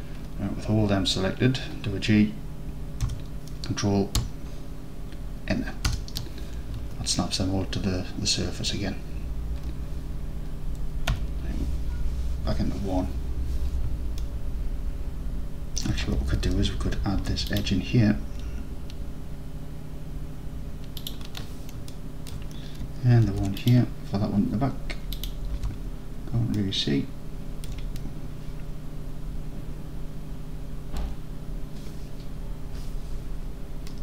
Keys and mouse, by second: 3.1 g, 5.9 ctrl+KP_Enter, 7.2 alt+drag, 8.1-8.5 alt+drag, 8.6 alt+click, 11.2 1, 14.3-15.2 alt+drag, 15.3 alt+click, 17.2 ctrl+r, 22.0 alt+click, 23.3 ctrl+r, 25.2 click, 25.6 alt+z, 26.8 alt+click, 27.1 alt+click.